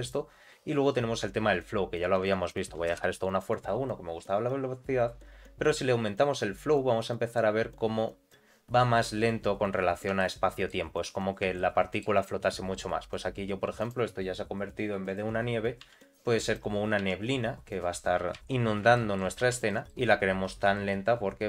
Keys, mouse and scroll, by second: 2.1-3.9 drag, 5.5-6.5 scroll up 2, 6.5-8.2 drag, 9.8-10.1 scroll up 1, 10.2 shift+middle click, 11.0-11.4 scroll up 1, 11.5 shift+middle click, 12.3-12.8 scroll up 1, 12.8-13.8 scroll down 2, 13.8 click, 15.0 click, 15.3-15.8 scroll down 2, 15.8 s, 17.0 g, 18.3 shift+Left, 18.5-18.8 scroll up 2, 18.9 shift+middle click, 19.4 z, 19.6 middle click, 20.4 scroll up 1, 20.7 shift+middle click.